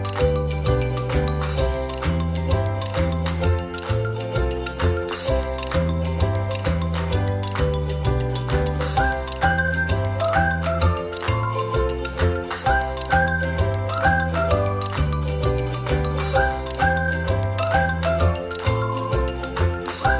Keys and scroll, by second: 12.5 space, 13.5 ctrl+-, 13.7 ctrl+-, 19.2 a.